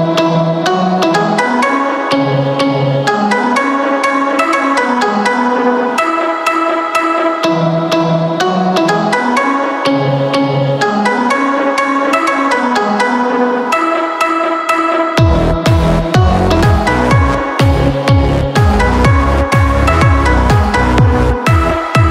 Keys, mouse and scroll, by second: 16.0 ctrl+j, 17.2 click.